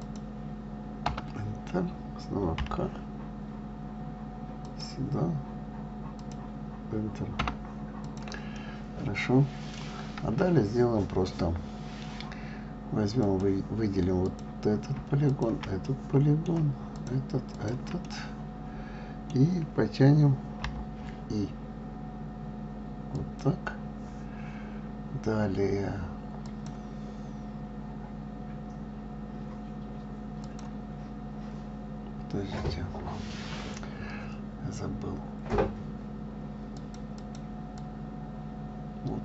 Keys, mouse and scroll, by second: 8.3 click, 8.9-11.9 middle drag, 13.5 click, 14.5 click, 15.6 shift+click, 16.2-17.2 middle drag, 17.2 shift+click, 17.8 shift+click, 18.3-20.9 middle drag, 26.7-29.8 drag, 30.7-33.7 drag, 37.5 click, 38.1-39.2 drag.